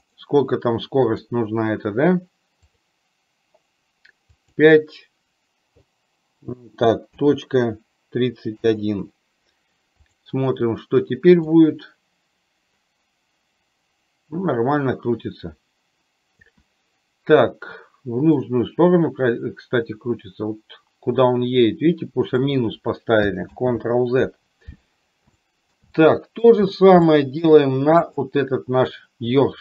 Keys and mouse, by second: 0.3-9.5 right drag, 10.2 click, 11.7-16.5 drag, 18.4-22.4 drag, 23.5 ctrl+z, 25.4 shift+middle click, 26.0 middle click, 27.2 shift+middle click, 28.0 click.